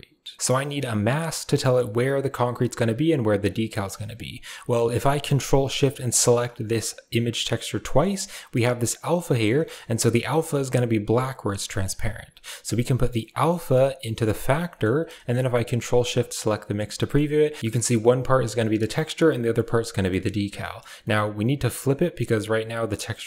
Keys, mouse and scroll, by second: 0.5-3.3 drag, 3.5 middle click, 4.0 click, 5.7 ctrl+shift+click, 6.5 ctrl+shift+click, 6.7 click, 7.6 middle click, 9.2 middle click, 11.5-12.0 middle drag, 12.0 drag, 13.1-14.3 drag, 14.5-14.9 middle drag, 16.2 ctrl+shift+click, 16.8 middle drag, 17.7 middle drag, 18.5 middle drag, 19.3 middle click, 20.0 middle click, 20.4 middle drag, 20.9-21.5 middle drag, 21.8 middle click, 22.9 middle click.